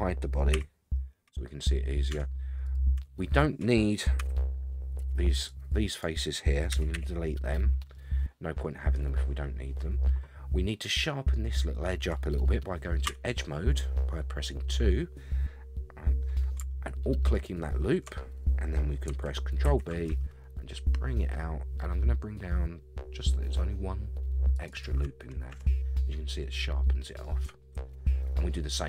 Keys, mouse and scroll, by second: 0.5 h, 0.9-1.6 middle drag, 1.7-2.1 scroll up 4, 2.1 Tab, 2.6 click, 3.0 Tab, 3.4 scroll up 1, 4.2 a, 4.3 a, 5.0 c, 6.7 x, 7.9-9.8 middle drag, 9.9 scroll up 3, 13.0 2, 17.3 alt+click, 19.6 ctrl+b, 24.7 shift+right click, 25.5 Tab, 25.9 scroll down 1, 26.0-27.2 middle drag, 27.4 Tab, 27.9 shift+middle click, 27.9 shift+scroll down 1, 28.4 middle click.